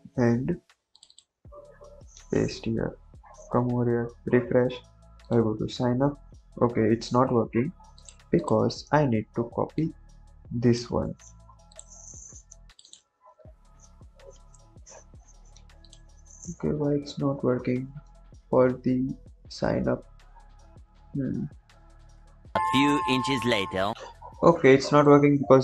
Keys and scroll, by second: 1.8 ctrl+v, 2.3 ctrl+s, 10.9 ctrl+c, 13.0 ctrl+v, 13.4 ctrl+s, 23.9 ctrl+j.